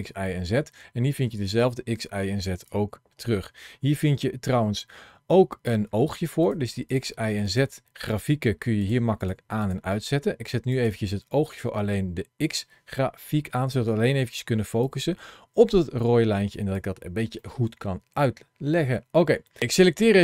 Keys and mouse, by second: 6.3 click, 7.3 click, 8.0 click, 9.1 click, 9.5 click, 13.1 shift+middle click, 14.7-16.7 drag, 17.3 shift+middle click, 19.7 click.